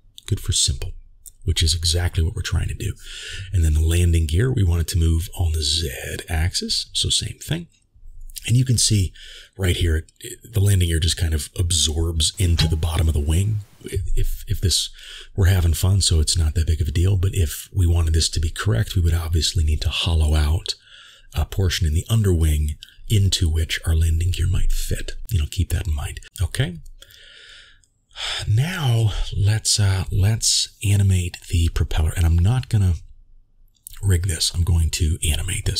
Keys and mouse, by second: 1.0 shift+middle click, 3.0-7.6 drag, 8.6 click, 12.8-13.5 middle drag, 21.1-22.1 drag, 26.8-27.9 drag, 28.9-30.0 drag, 31.2 n, 31.7-32.3 ctrl+middle drag, 34.9-35.7 drag.